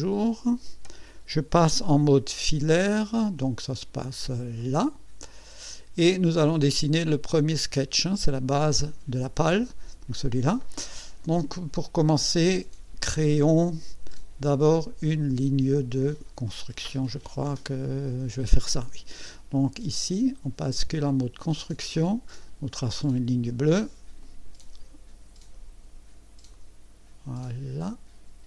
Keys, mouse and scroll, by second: 0.0 click, 3.7 click, 4.6 click, 5.3 scroll up 1, 21.4 click, 22.7 click, 24.2 click, 26.5 click.